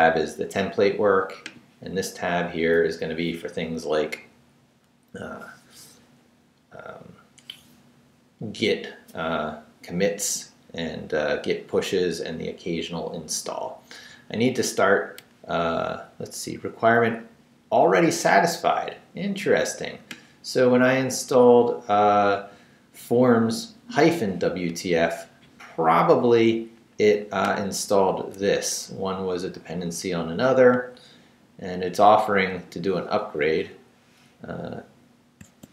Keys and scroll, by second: 32.5 Up, 35.4 space.